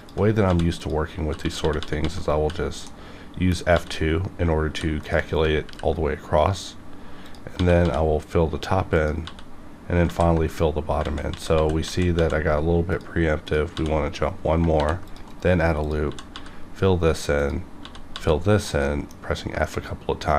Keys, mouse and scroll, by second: 0.5-2.3 typing, 0.7 click, 0.8 click, 2.8 middle click, 3.7 f, 4.7 ctrl+r, 5.0 ctrl+click, 5.2 right click, 5.6 ctrl+r, 6.3 right click, 6.4 right click, 7.2 click, 7.5 f, 7.8 f, 8.9 click, 9.2 f, 10.0 ctrl+z, 10.8 scroll up 1, 11.0 ctrl+z, 12.9 click, 13.7 click, 13.7 f, 14.4 scroll down 1, 14.7 r, 15.1 click, 15.3 right click, 15.8 click, 16.1 f, 16.3 f, 16.7-17.3 scroll up 1, 17.3 click, 17.8 f, 18.1 f, 18.4-18.8 scroll down 1, 18.8 middle click, 19.0 middle click, 19.2 scroll down 1, 19.6-20.3 middle drag.